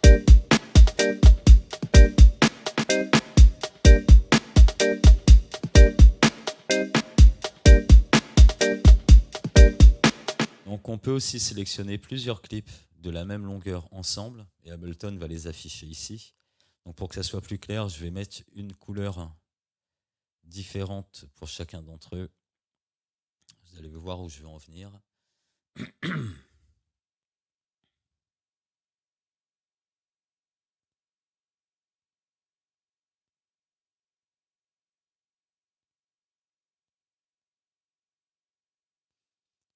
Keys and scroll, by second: 10.4 space.